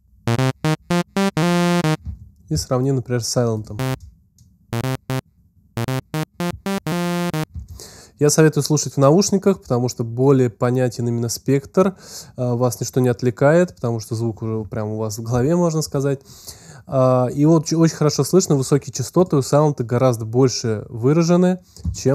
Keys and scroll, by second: 2.3 alt+space, 3.7 alt+space, 4.6 space.